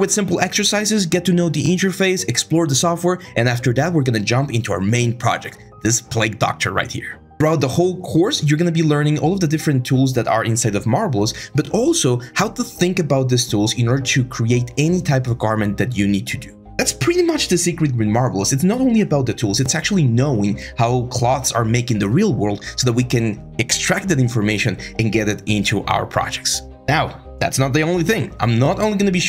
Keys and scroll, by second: 2.7 ctrl+k, 3.1 ctrl+z, 3.3 ctrl+z, 7.5 ctrl+d, 9.3 typing, 9.4 Return, 11.8 ctrl+z, 15.2 Return, 19.6 ctrl+z, 19.7 ctrl+z, 22.2-23.2 typing, 25.1 Return.